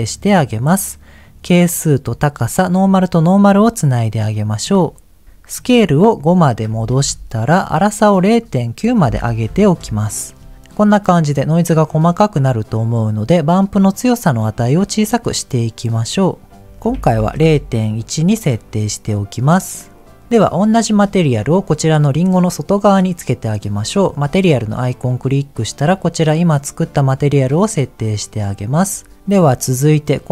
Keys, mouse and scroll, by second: 0.6 click, 1.1 click, 2.7 click, 4.3 middle click, 4.7-5.2 scroll up 2, 5.5-7.0 drag, 8.3-9.7 drag, 10.5-11.5 scroll up 1, 13.9-17.4 drag, 20.2-20.8 scroll down 4, 21.0 shift+middle click, 21.7 click, 24.4-25.8 drag, 29.3 click.